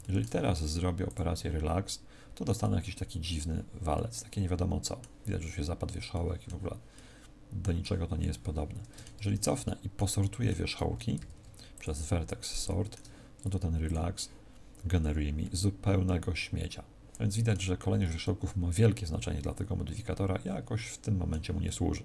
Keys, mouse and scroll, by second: 1.0 click, 2.5 middle click, 3.9 middle click, 6.0 middle click, 6.9 middle click, 9.3 ctrl+z, 9.5 middle click, 10.1 middle click, 11.1 ctrl+v, 12.6 shift+middle click, 13.7 click, 15.3 middle click, 21.5 middle click.